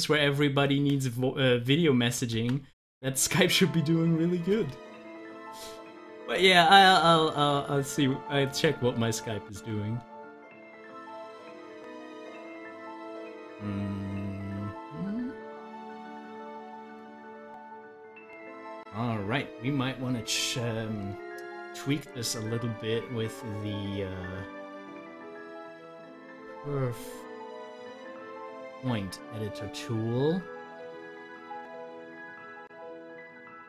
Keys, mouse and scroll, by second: 2.2 click, 2.3 ctrl+z, 4.7 ctrl+z, 21.9 scroll up 1, 26.4 c, 28.7 click, 32.4 double click, 33.5 Delete.